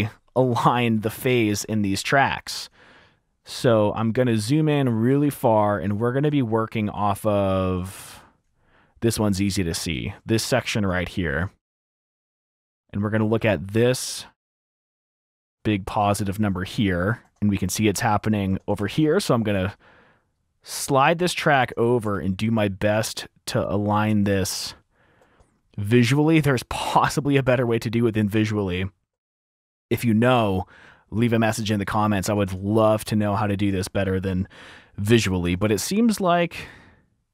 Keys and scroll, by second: 0.2 F2, 0.5 super+`, 2.1 t, 4.5 t, 6.9 typing, 12.3 typing, 15.6 typing, 16.7 super+4, 17.4 super+4, 19.0 F7, 19.6 super+4, 21.8 F7, 24.4 super+4, 25.3 F7, 27.6 super+4, 32.7 F7, 35.6 F7.